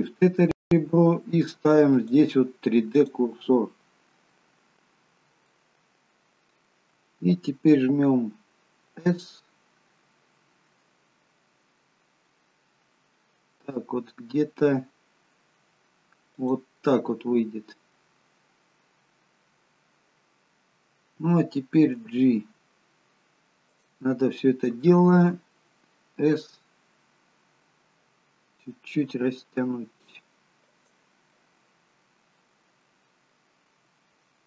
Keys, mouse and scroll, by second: 1.9 click, 5.5 middle click, 8.9 s, 16.9 middle click, 22.1 g, 26.2 s, 31.3 middle click, 32.8 middle click, 33.7 s.